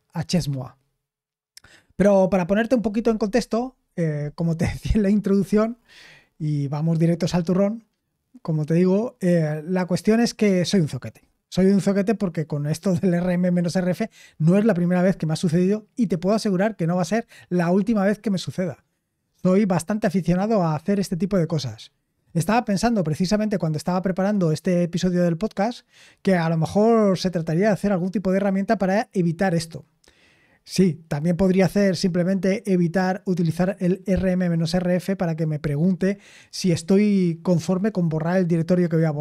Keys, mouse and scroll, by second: 1.6-39.2 scroll down 2.